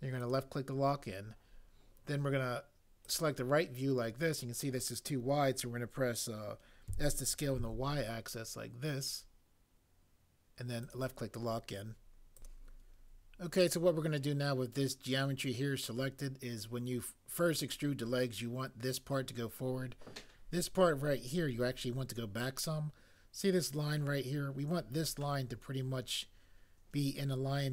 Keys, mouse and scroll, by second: 6.8 s, 7.6 y.